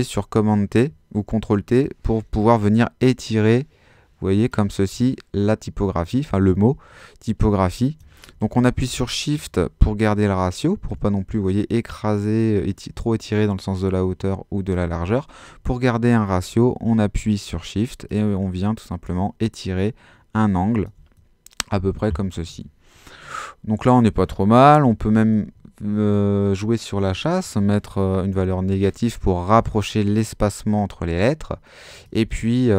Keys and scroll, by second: 8.4 shift+super+z, 14.9 super+z, 22.5 Home, 24.6-25.7 typing, 28.3 Home.